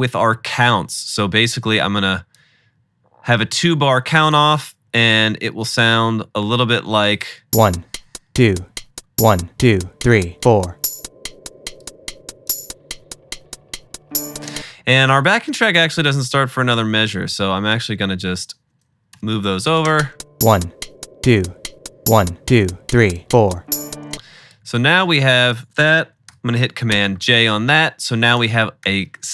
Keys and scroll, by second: 7.4 shift+space, 14.5 space, 17.1 super+d, 19.2 BackSpace, 19.9 space, 24.2 space, 26.3 super+j, 28.3 super+j, 28.9 typing.